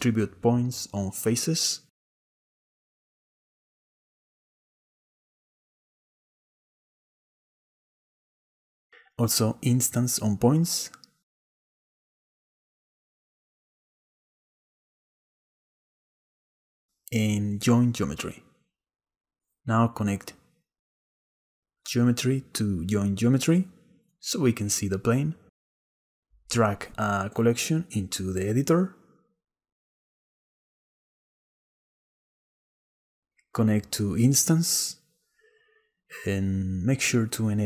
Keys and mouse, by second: 9.8 shift+a, 15.7 click, 16.8 shift+a, 21.8-23.8 drag, 29.9 click, 32.0 click, 32.0 right click, 33.2-35.3 drag.